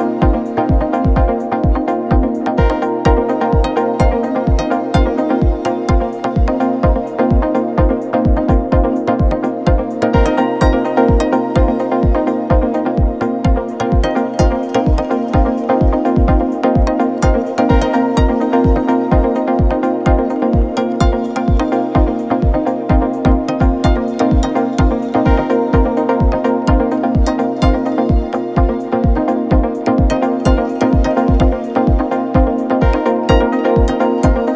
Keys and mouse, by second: 1.2-1.6 shift+middle drag, 4.0-4.8 shift+middle drag, 7.8 shift+middle click, 8.6-9.4 shift+middle drag, 10.4 shift+middle click, 11.6 shift+d, 18.7-20.0 middle drag, 21.1 shift+click, 21.8 click, 22.4 Tab, 23.1 3, 31.1 shift+middle click, 32.6 middle click, 33.5 Tab.